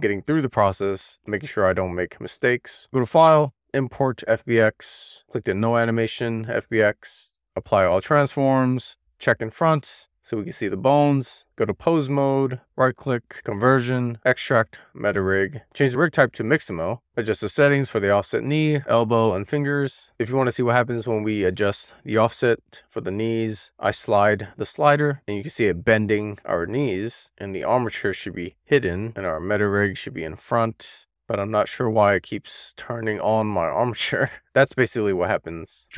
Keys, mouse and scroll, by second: 2.3-6.3 drag, 7.4 ctrl+a, 8.9 click, 9.6 click, 10.8-11.3 shift+middle drag, 11.3 click, 12.0 click, 12.8-15.8 right drag, 15.8 click, 17.7 click, 18.8 click, 19.7-23.5 drag, 23.5 middle click, 24.7-27.7 drag, 29.7 click, 30.9 middle click, 31.0-33.7 drag, 34.7 click, 35.6 w, 35.7 click.